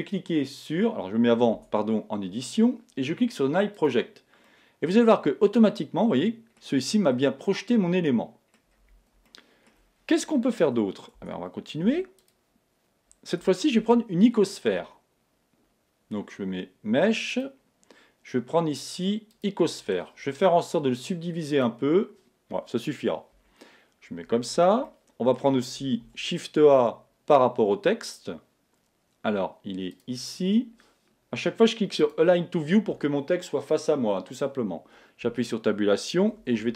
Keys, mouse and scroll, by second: 1.6 Tab, 3.8 click, 4.5-6.4 middle drag, 6.9-7.5 scroll up 1, 7.5-11.6 middle drag, 11.2 Tab, 11.6 scroll down 1, 11.8 x, 13.8 shift+a, 21.5 click, 23.3 KP_1, 24.8-26.8 middle drag, 26.0 shift+a, 32.0 click, 35.2 Tab, 36.2-36.7 typing.